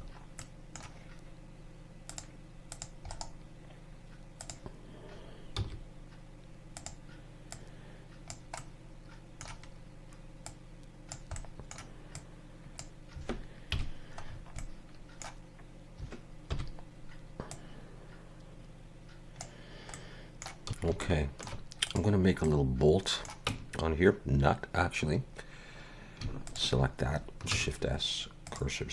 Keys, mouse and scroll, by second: 0.4 middle click, 2.1 click, 2.7 click, 3.1 right click, 5.6 s, 7.5 click, 8.6 middle click, 10.4 click, 11.3 middle click, 12.1 click, 13.7 KP_Decimal, 14.2 scroll down 6, 14.6 middle click, 16.5 KP_1, 17.5 click, 19.9 middle click, 20.6-21.0 scroll up 3, 21.1 shift+middle click, 21.9 click, 22.5 middle click, 23.5 Tab, 25.3 scroll up 2, 26.5 alt+shift+click, 27.6 shift+s.